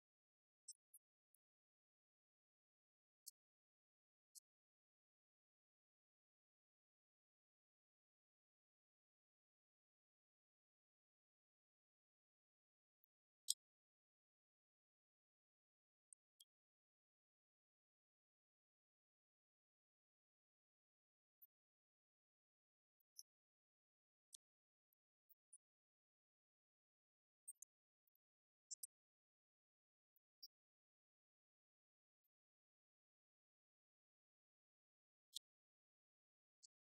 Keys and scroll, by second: 0.1 ctrl+d, 0.5 Right, 1.1 Down, 2.7 Left, 4.2 Right, 5.6 Left, 7.4 Right, 10.4 Left, 11.3 Right, 11.7 Up, 11.8 Left, 12.5-13.4 typing, 13.6 shift+Down, 14.2 ctrl+d, 14.9 Right, 15.3 Left, 15.9 1, 16.0 Return, 17.0 ctrl+d, 19.1 Right, 20.0 Up, 20.3 Right, 21.3 Up, 21.5 Left, 28.4 2, 28.5 Return, 28.7 2, 28.9 Return, 32.2 Right, 32.4 Up, 32.6 Left, 33.9 Up, 34.9 Left, 36.7 1, 36.8 Return.